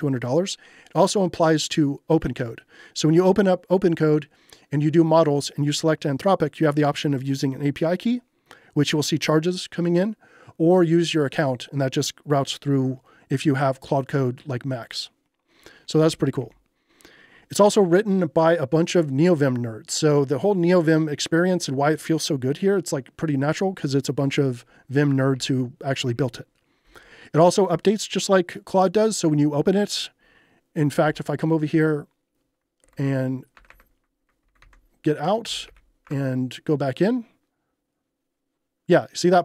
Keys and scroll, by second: 15.7-16.9 typing, 25.3 j, 31.1 ctrl+h, 32.9 shift+c, 33.6 BackSpace, 34.5 ctrl+c, 35.2-36.0 typing, 36.0 Return.